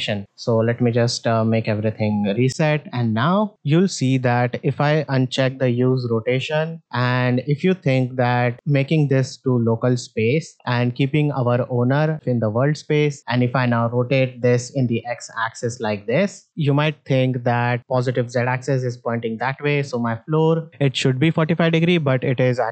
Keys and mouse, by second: 0.2 a, 0.9 alt+g, 1.0 alt+r, 2.4 shift+middle drag, 3.2 shift+middle click, 5.6 click, 8.4-9.6 drag, 14.5 r, 19.9 click, 21.3-22.7 drag.